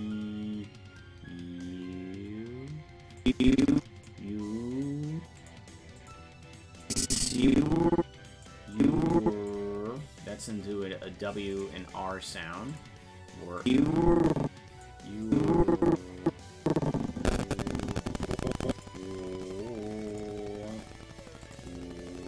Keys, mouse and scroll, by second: 3.2 click, 5.4 click, 6.0 click, 6.9-8.5 drag, 8.8 click, 11.5 click, 12.7 click, 13.6-14.8 drag, 15.3-18.9 drag, 20.1 click, 21.4 click.